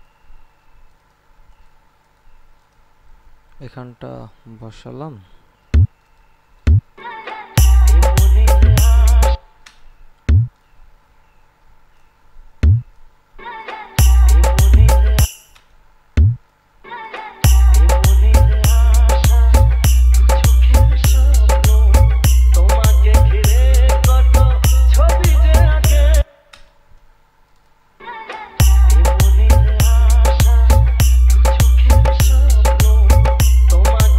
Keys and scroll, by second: 7.1 space, 9.5 space, 13.5 space, 15.5 space, 17.0 space, 26.4 space, 28.2 space.